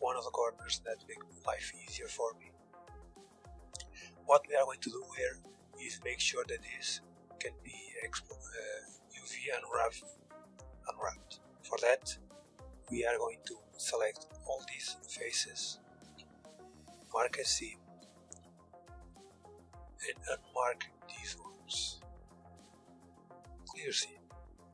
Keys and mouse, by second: 0.6 KP_1, 1.0 z, 6.8-10.0 drag, 11.8-16.3 right drag, 15.6 ctrl+e, 17.9-20.7 typing, 22.2 ctrl+e, 23.7 a, 24.1 a, 24.6 u.